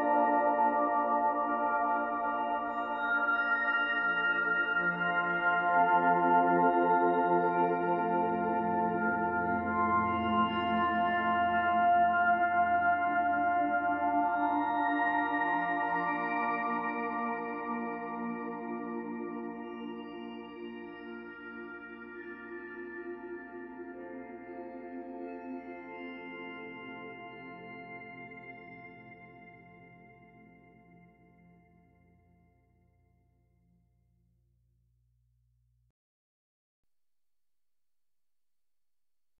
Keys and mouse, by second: 0.8 Delete, 2.0 click, 3.1 ctrl+s, 3.6 alt+click, 4.7 click, 5.7 alt+click, 9.1 click, 10.5 ctrl+alt+click, 12.0 ctrl+alt+click, 12.4 alt+click, 13.7-19.4 ctrl+alt+drag, 19.7 ctrl+s, 19.7 ctrl+click, 25.5-39.4 drag.